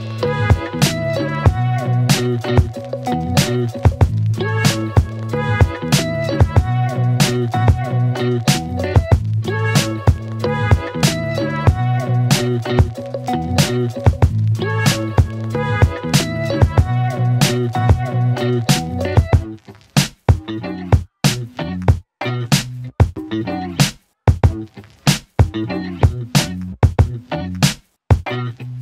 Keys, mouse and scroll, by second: 9.5-10.0 click, 10.0-11.2 typing, 12.4-14.2 click, 16.5 Return, 17.0 click, 18.3 Return, 20.0 click.